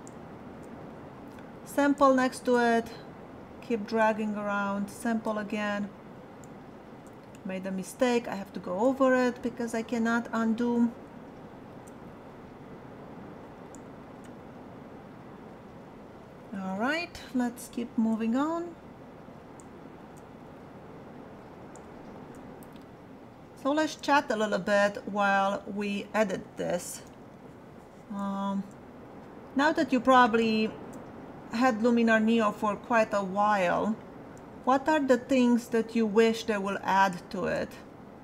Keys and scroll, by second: 27.1 ].